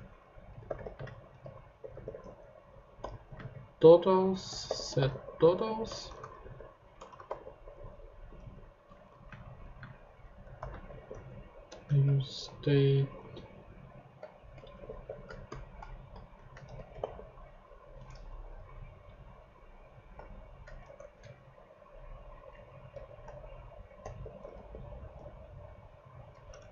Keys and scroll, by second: 0.3-11.6 typing, 9.1 Right, 11.7 Return, 13.2 shift+super+z, 14.1-17.5 typing, 20.8 ctrl+shift+Tab, 21.7 ctrl+Tab, 22.9 ctrl+shift+Tab, 23.0 ctrl+shift+d, 23.5-25.2 typing, 26.5 BackSpace.